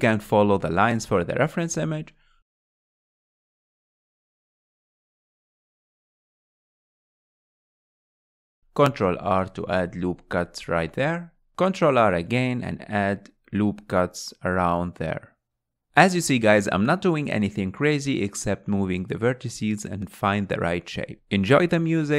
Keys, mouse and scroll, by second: 1.3 g, 1.5 g, 2.4 alt+click, 3.6 g, 4.4 s, 6.2 scroll down 2, 6.5 scroll up 3, 6.8 click, 8.1 ctrl+r, 10.4 alt+click, 11.0 s, 12.0 alt+click, 12.3 s, 13.2 ctrl+r, 15.3 click, 16.1 click, 17.6 g, 18.3-19.9 right drag, 20.3 alt+z, 20.8-21.8 shift+middle drag, 21.8 alt+z.